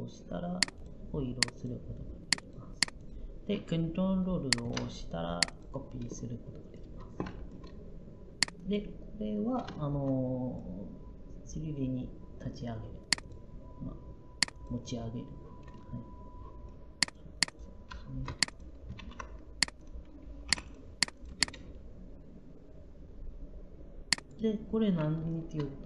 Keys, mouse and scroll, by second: 20.3 p.